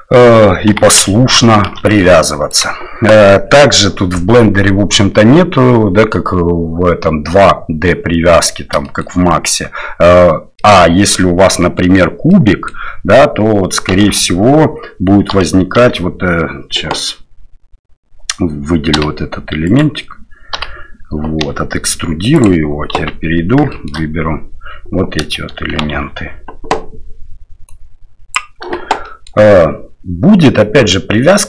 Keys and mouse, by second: 0.7 g, 8.8 shift+middle click, 10.6 middle click, 12.3 middle click, 14.0 alt+a, 15.3 l, 15.8 e, 19.7 right click, 20.6 l, 21.4 e, 22.9 KP_7, 23.7 shift+middle click, 25.9 alt+a, 27.7 click, 29.1 shift+middle click.